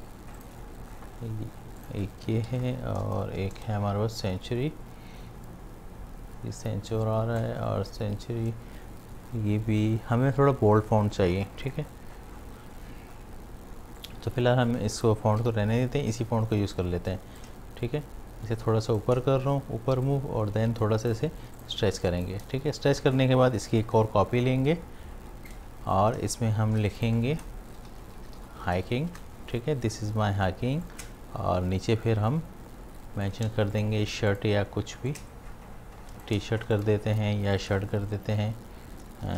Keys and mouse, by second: 2.2-4.6 typing, 14.0-20.0 drag, 17.7-20.0 shift+drag, 20.4-21.6 drag, 22.0 space, 22.1 click, 23.8-26.7 alt+drag, 26.7-28.9 typing, 27.0 click, 27.4 ctrl+a, 31.2-33.5 shift+drag, 35.1-36.7 alt+drag, 36.9 ctrl+a, 39.0-39.3 typing.